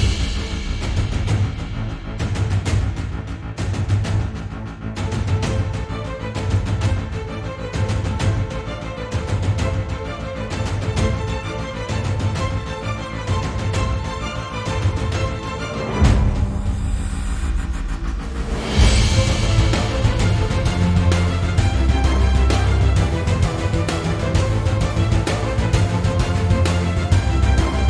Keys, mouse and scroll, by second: 0.3 drag, 0.4 g, 0.7 click, 0.9 g, 1.8 click, 1.9 g, 2.4 click, 3.0 click, 3.1 g, 3.8 click, 4.1 x, 5.0 drag, 5.1 g, 5.4 click, 5.6 g, 6.4 click, 6.6 shift+middle click, 7.0 click, 7.1 g, 7.6 click, 7.8 x, 8.4 click, 8.6 g, 9.1 click, 9.7-10.8 shift+middle drag, 10.1-10.4 scroll up 2, 10.8 click, 11.4 x, 12.2-12.8 scroll down 2, 12.8-13.4 shift+middle drag, 13.4 click, 13.5 x, 14.0 click, 14.1 x, 14.5-14.9 scroll down 1, 14.9-15.6 shift+middle drag, 15.3 scroll up 1, 15.6 click, 15.8 x, 16.6 click, 16.7 g, 17.6 click, 17.7 g, 19.7 scroll down 1, 19.9-22.5 shift+middle drag, 20.4-20.7 scroll down 1, 21.3-21.6 scroll up 1, 22.0 scroll up 1, 22.5 click, 22.6 g, 23.8 click, 23.9 g, 24.7 click, 24.8 x, 25.3-25.6 shift+middle drag, 25.6 click, 25.8 x, 27.0-27.5 shift+middle drag, 27.5 click, 27.6 g.